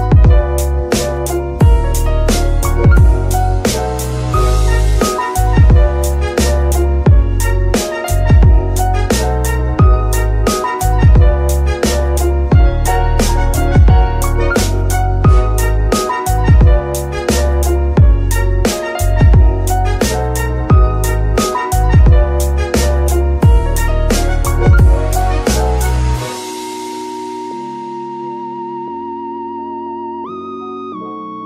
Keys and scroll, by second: 13.0 shift+d, 15.4 BackSpace, 15.5 BackSpace, 15.7 BackSpace, 15.8 BackSpace, 17.7-20.3 typing, 21.8 Tab, 22.4 s, 23.6 Tab, 27.2 shift+s, 29.9 z.